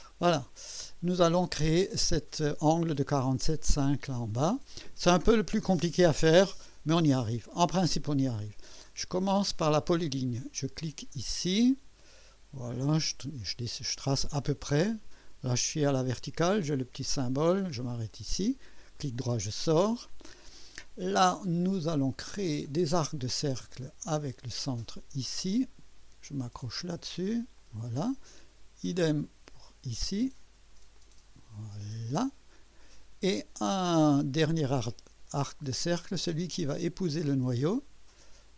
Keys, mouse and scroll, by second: 0.1-0.9 right drag, 9.6 click, 11.5 click, 13.1 click, 16.5 click, 18.1 click, 19.0 right click, 22.6 click, 24.6 click, 26.6 click, 27.6 click, 29.1 click, 30.9 click, 31.9 click, 34.6 click, 37.3 click.